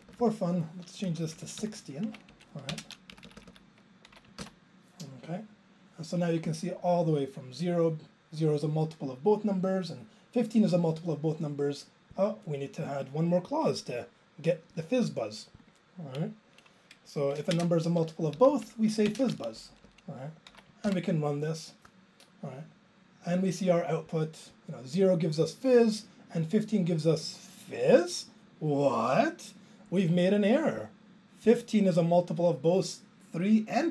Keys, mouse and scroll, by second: 1.1 BackSpace, 1.3 6, 1.6 Down, 2.1 ctrl+a, 2.3 Up, 2.7 ctrl+space, 3.1 Down, 3.3 Down, 3.4 Down, 3.5 Down, 4.8 ctrl+j, 12.1 click, 17.5 alt+space, 18.4 Down, 18.5 Left, 19.1 ctrl+space, 19.2 ctrl+a, 19.6 Up, 19.7 Up, 22.3 ctrl+j.